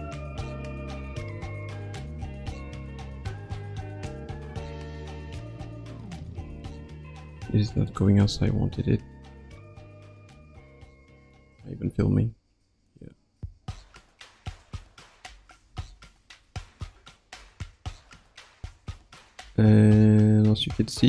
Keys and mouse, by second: 6.6-8.1 ctrl+middle drag, 8.1 ctrl+z, 9.9-21.0 drag.